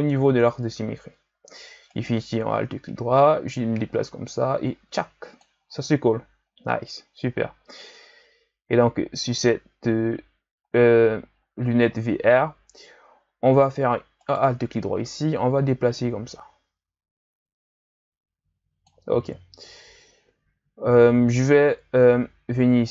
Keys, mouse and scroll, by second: 0.0 Tab, 1.9 alt+right click, 3.1-6.2 drag, 10.9-11.4 scroll down 2, 11.4-12.0 scroll up 2, 12.0-14.2 scroll down 1, 14.2 alt+right click, 15.0-18.1 drag.